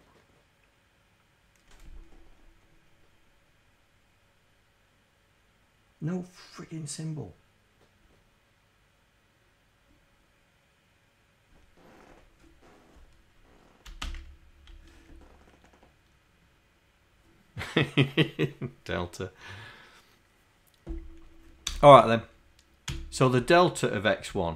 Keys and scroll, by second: 23.0 d, 24.3 Right.